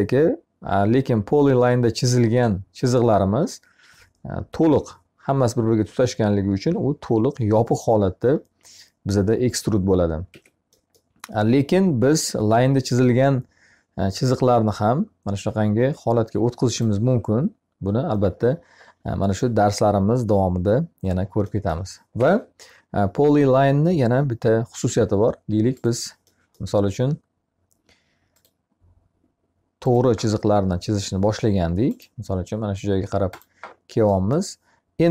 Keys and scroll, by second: 9.7 Escape, 21.5 Escape.